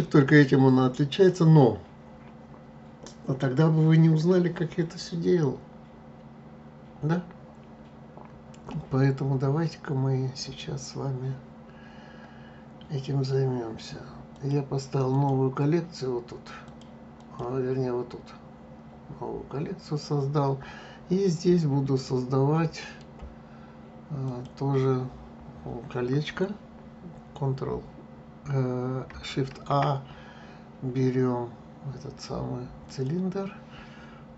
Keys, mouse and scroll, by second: 14.3 click, 15.1 click, 16.6-19.7 drag, 22.0-24.3 middle drag, 24.3 click, 29.5 shift+a.